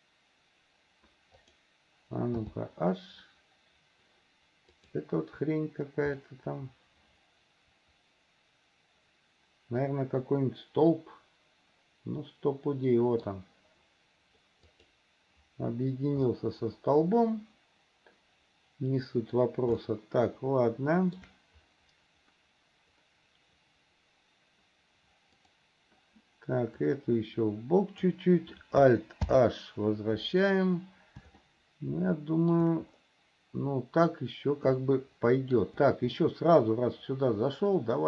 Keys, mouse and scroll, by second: 1.6 click, 2.6 h, 4.9 click, 6.4-13.4 middle drag, 14.9 click, 16.5-19.5 middle drag, 20.0-21.4 shift+middle drag, 25.5 click, 27.1-28.2 drag, 29.5 alt+h, 31.6-32.7 middle drag, 34.9 shift+middle click, 36.4-38.0 middle drag.